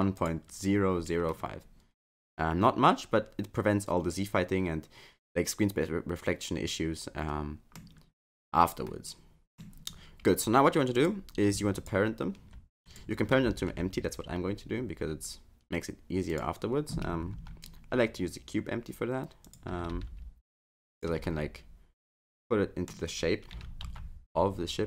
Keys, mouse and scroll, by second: 1.3 middle click, 8.2 scroll down 3, 8.9 middle click, 11.0 click, 11.8 shift+click, 12.9 click, 13.5 shift+a, 17.4 s, 19.7 s, 21.2 middle click, 23.6 s.